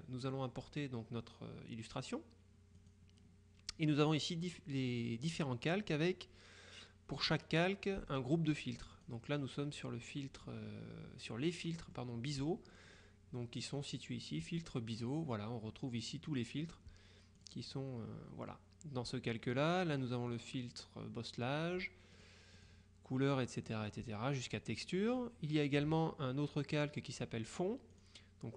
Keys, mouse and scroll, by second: 2.9 click, 9.0 click, 11.7 middle click, 13.9 click, 17.5 click, 19.7 click, 20.4 click, 22.3-23.3 drag, 28.0 click.